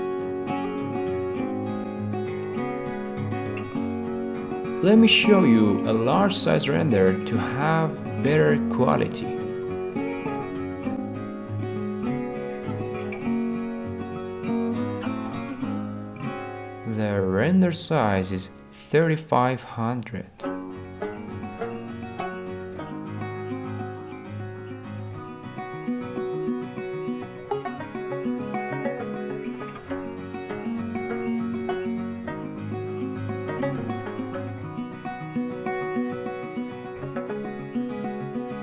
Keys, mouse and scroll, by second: 0.6-1.8 middle drag, 2.6-4.1 middle drag, 5.1-6.2 drag, 7.6-8.7 drag, 8.8-9.9 drag, 11.1-12.2 drag, 13.5-14.6 drag, 20.5-21.6 drag, 26.2 click, 27.2-28.2 middle drag, 29.4-30.5 middle drag, 34.5-35.6 drag.